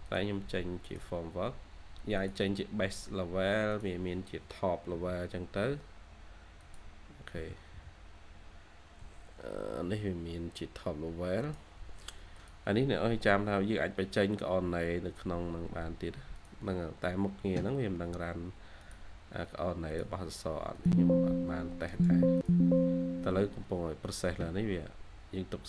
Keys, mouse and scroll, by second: 6.3-7.6 typing, 12.7-13.0 scroll down 1, 13.0 typing, 13.3-14.2 scroll up 1, 14.2 typing, 21.8 right click, 25.4-25.6 scroll down 1.